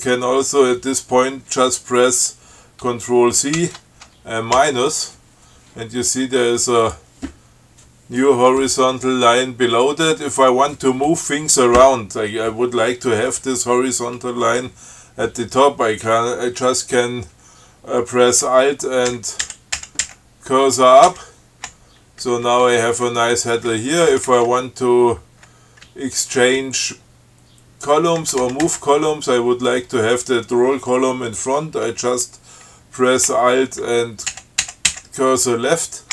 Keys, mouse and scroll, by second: 3.8 ctrl+c, 4.8 -, 7.0 click, 19.3 alt+Up, 21.3 alt+Up, 22.5 Down, 23.9 Right, 26.1 Left, 26.8 Right, 34.5 alt+Left.